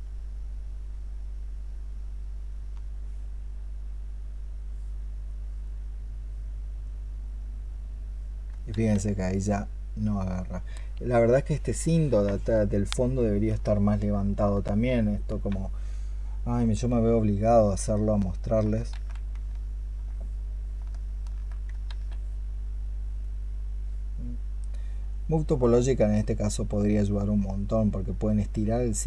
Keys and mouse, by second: 1.7 alt+click, 5.5 double click, 7.1 double click, 8.6 ctrl+z, 14.5 alt+click, 16.8 alt+click, 18.8 ctrl+z, 19.4 alt+click, 20.8 alt+click, 21.7 alt+click, 23.0 double click.